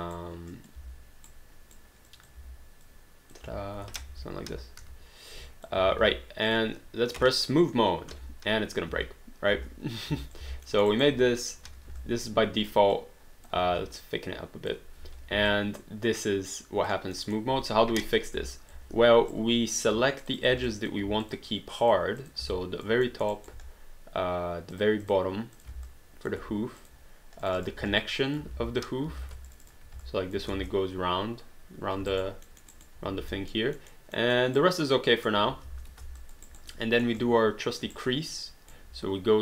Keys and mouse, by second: 0.5 click, 1.3 right click, 2.1 click, 2.4 w, 2.8 click, 4.1 ctrl+z, 5.3 click, 5.9 alt+d, 6.5 click, 8.1 3, 8.9 space, 10.3 alt+click, 10.4 alt+d, 10.7 alt+middle click, 10.9 alt+right click, 11.4 click, 12.0 alt+click, 13.7 r, 14.0 click, 15.0 3, 15.6 alt+click, 17.3 alt+middle click, 18.0 1, 18.6 alt+click, 18.9 3, 19.3 right click, 19.8 q, 20.2 click, 20.7 alt+click, 21.2 shift+click, 22.5 alt+click, 23.0 alt+middle click, 23.3 alt+right click, 24.7 shift+click, 25.8 alt+click, 26.8 shift+click, 28.0 alt+click, 28.5 ctrl+z, 29.5 shift+click, 30.5 space, 32.1 alt+right click, 32.5 alt+middle click, 32.7 alt+right click, 33.5 alt+middle click, 34.1 alt+middle click, 34.6 alt+right click, 35.7 space, 36.2 alt+click, 36.5 alt+right click, 36.7 alt+middle click, 37.2 alt+click, 37.9 alt+right click.